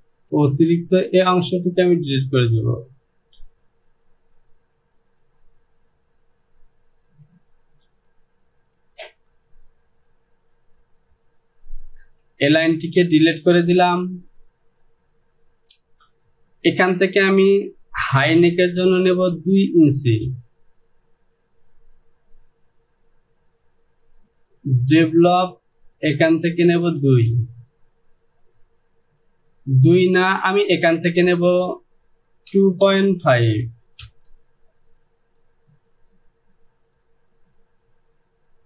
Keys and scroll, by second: 3.6 Delete, 7.9 Home, 12.2 Delete, 18.7 Delete, 31.7 Down, 32.6 KP_2, 32.9 KP_Decimal, 33.3 KP_5, 34.1 Return.